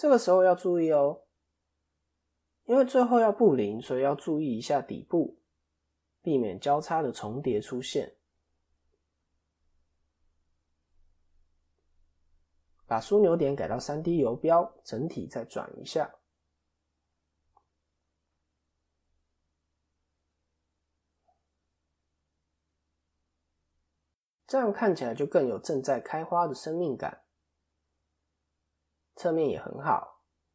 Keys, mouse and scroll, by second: 1.6 click, 2.2 scroll up 2, 2.5 middle click, 4.0 scroll up 1, 4.3 shift+middle click, 5.0 scroll up 1, 5.0 middle click, 6.1-6.6 scroll down 3, 6.4 middle click, 9.5 KP_7, 11.2 click, 11.6-12.1 scroll down 1, 12.6-13.7 scroll down 2, 13.7 click, 25.5 click, 26.6 ctrl+KP_3, 27.3 scroll down 2, 28.4 scroll down 1, 28.4 KP_3, 29.3 KP_1.